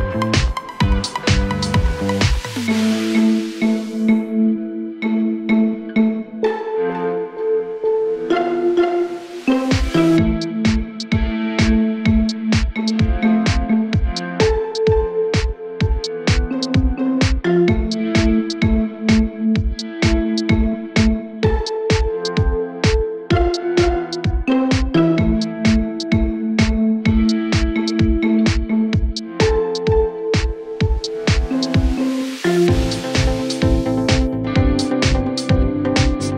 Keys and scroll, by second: 0.2 KP_Add, 7.8 F3, 22.6 ctrl+Page_Down, 24.2 shift+F2, 27.4 KP_Add, 31.6 ctrl+Page_Down.